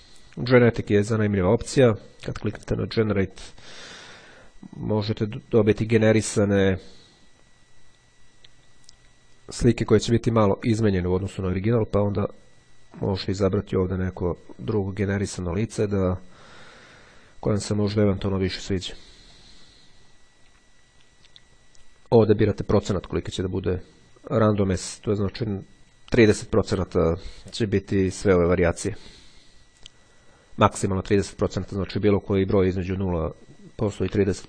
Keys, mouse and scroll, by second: 3.0-4.1 drag, 9.5-10.9 drag, 11.7 click, 13.0 click, 14.2 click, 15.4 click, 17.4-18.8 drag, 19.4 click.